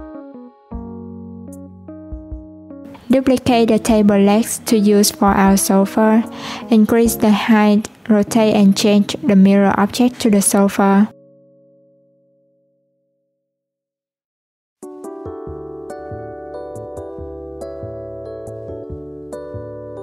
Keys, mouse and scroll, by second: 1.6 shift+s, 3.8 click, 5.0 click, 6.1 shift+d, 10.3 click, 11.1 Tab, 11.6 alt+z, 11.8 click, 12.7 click, 15.3 Tab.